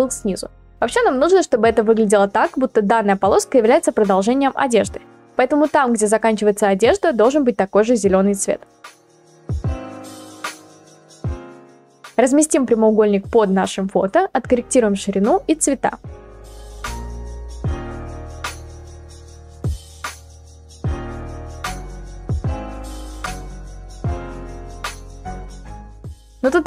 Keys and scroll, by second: 18.6 ctrl+t, 25.0 Return.